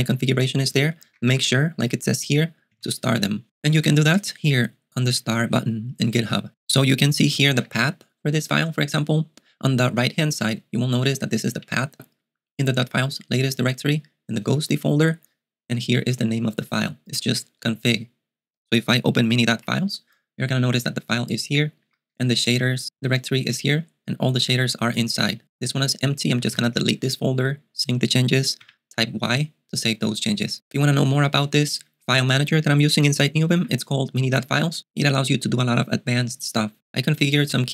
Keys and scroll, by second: 0.8-2.5 typing, 2.8 alt+x, 19.6 typing, 22.3 k, 25.4 k, 26.4 d, 26.5 d, 27.4 s, 28.6 y, 30.6 typing, 33.6 Return.